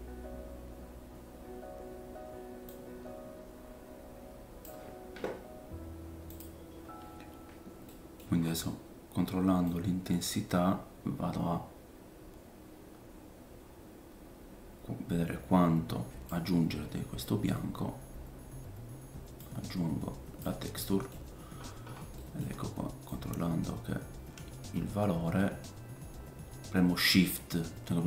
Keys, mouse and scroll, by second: 1.7 scroll down 1, 2.7 click, 7.4-7.9 scroll down 2, 7.9 middle click, 8.4 scroll up 1, 9.7 click, 16.6-17.2 scroll down 5, 16.9 middle click, 17.2 middle click, 17.5-19.4 scroll down 2, 19.4 click, 20.8 middle click, 21.3-22.5 scroll up 9, 21.9-23.8 middle drag, 23.0 click.